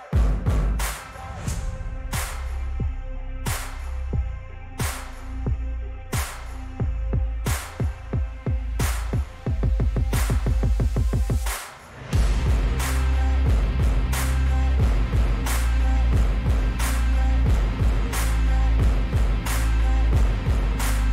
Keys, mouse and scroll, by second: 0.0-1.3 scroll down 3, 1.3 click, 2.1 click, 4.1 click, 8.9 click, 10.8-12.8 drag, 14.2 right click, 16.0 click, 19.0 click.